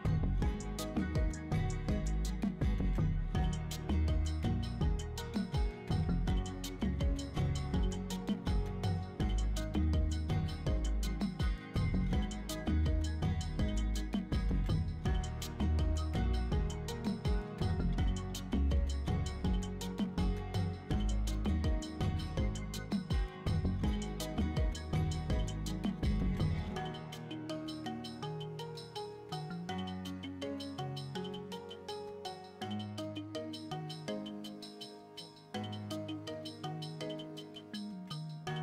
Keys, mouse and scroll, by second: 0.0 shift+middle click, 0.2 Tab, 0.6 middle click, 1.0-3.8 typing, 1.1 right click, 2.0 middle click, 2.6 right click, 4.2 right click, 4.7 Tab, 4.8 right click, 5.8 g, 6.2 y, 6.7 click, 7.0 middle click, 7.0 scroll up 2, 7.1 scroll down 1, 7.2 shift+middle drag, 7.5 shift+middle click, 8.0 Tab, 8.2 shift+middle click, 8.7 a, 9.0 s, 9.2 x, 10.0 click, 10.1 middle click, 11.1 Tab, 11.2 middle click, 11.9 right click, 12.2 scroll up 2, 12.4 Tab, 14.5 2, 14.8 right click, 15.2 middle click, 15.3 3, 15.3 right click, 16.0 middle click, 16.5 shift+s, 18.0 middle click, 18.4 shift+middle click, 18.8 shift+a, 20.2 click, 21.3-25.7 drag, 26.8 click, 27.8-29.1 drag, 29.7-30.8 middle drag, 31.2 middle click, 31.8 click, 33.3 middle click, 33.7 scroll up 3, 34.0 middle click, 36.0-37.8 drag, 38.2 middle click.